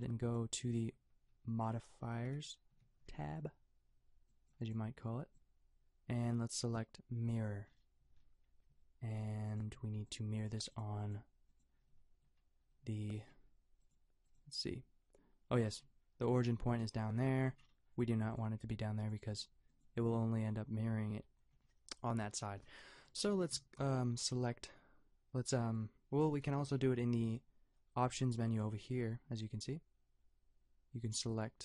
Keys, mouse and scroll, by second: 1.6 n, 2.3 t, 2.7 n, 3.0 t, 9.5-14.9 drag, 26.5 t, 29.7-31.6 middle drag.